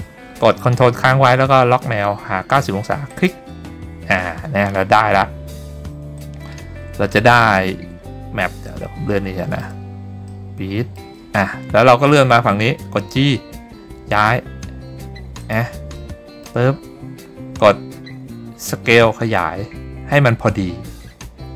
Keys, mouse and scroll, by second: 3.2 ctrl+click, 6.3-7.5 drag, 8.8 shift+middle click, 10.4 middle click, 13.1 g, 15.7 click, 16.1 shift+middle click, 19.0 s.